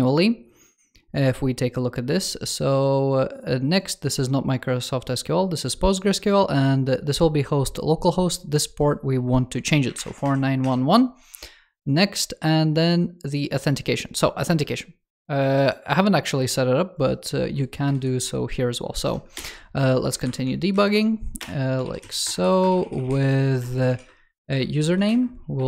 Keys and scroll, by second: 17.8 shift+super+Up, 20.6 shift+super+Right, 21.7 super+s.